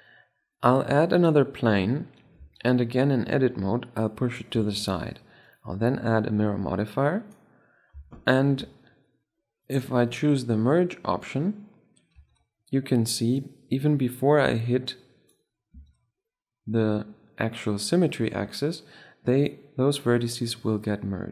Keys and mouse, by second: 2.3 Tab, 3.1-5.0 drag, 4.4 Tab, 5.4-7.1 drag, 8.2-11.7 drag, 12.0 Tab, 13.2-15.0 drag, 15.6 Tab, 16.7-18.8 middle drag, 20.2-21.3 drag.